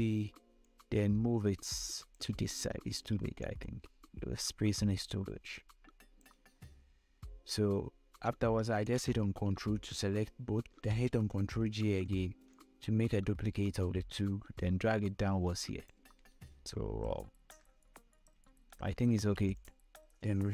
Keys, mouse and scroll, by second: 1.4-3.1 shift+drag, 3.1 scroll up 1, 4.2-7.2 shift+drag, 7.2 scroll down 1, 7.9 scroll up 1, 9.5 ctrl+click, 12.3 ctrl+j, 13.3-17.0 drag, 17.0 Up, 19.3 Down, 20.2 click.